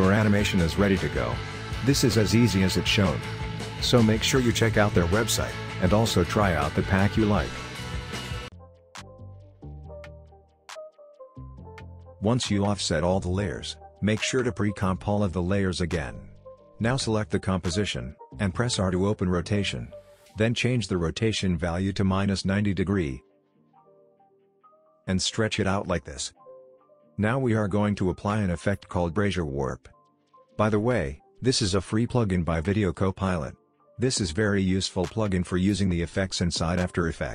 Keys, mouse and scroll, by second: 7.9 ctrl+z, 8.1 drag, 10.3 ctrl+z, 10.3 click, 10.4 ctrl+z, 10.5 click, 10.8 space, 11.1 click, 11.2 space, 11.5 click, 11.8 u, 12.0 click, 12.2 F9, 12.4 click, 12.6 space, 13.0 drag, 14.3 right click, 14.5 click, 14.5-15.5 typing, 15.8 click, 19.9 Return, 22.8-24.4 drag, 31.1 ctrl+space, 34.0-36.8 typing.